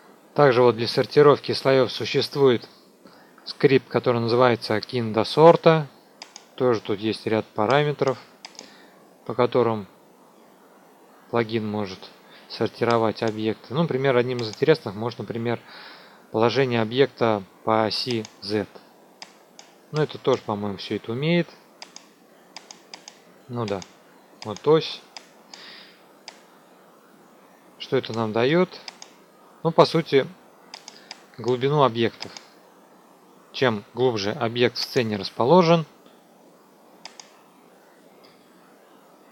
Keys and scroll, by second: 31.9 ctrl+a, 33.9 `.